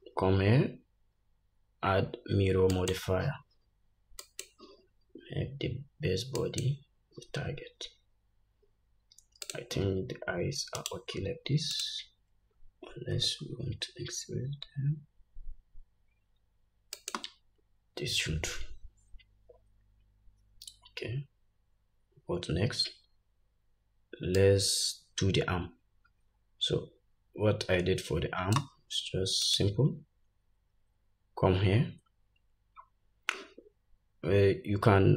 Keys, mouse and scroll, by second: 8.3-9.0 scroll down 1, 9.6 click, 11.9 click, 13.3 s, 24.6-29.8 drag.